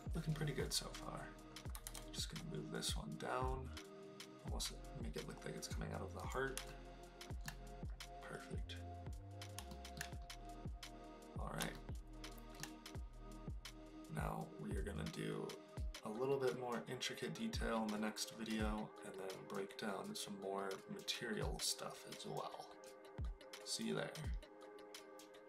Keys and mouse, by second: 1.7 g, 1.8 z, 6.2 click, 6.7-7.4 shift+middle drag, 9.8 shift+middle click, 11.9 shift+middle click.